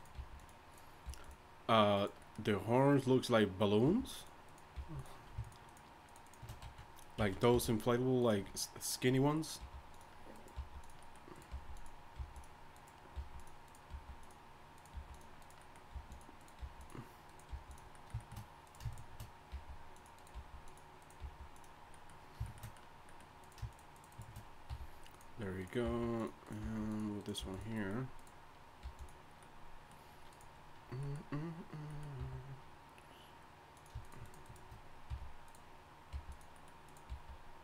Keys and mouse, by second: 0.2 g, 1.1 g, 3.8 g, 4.7 g, 6.1 shift+right click, 7.2 z, 7.5 f, 9.6-13.9 typing, 14.9 g, 15.9 g, 16.4 click, 16.6 g, 17.5 g, 19.5 g, 20.3 g, 21.2 g, 24.6-27.8 drag, 24.7 f, 25.8 g, 26.6 g, 27.4 g, 28.1 click, 28.8 g, 29.5 click, 29.8 click, 32.2 e, 34.3 shift+right click, 35.1 f, 36.1 g, 36.5 click, 37.1 g.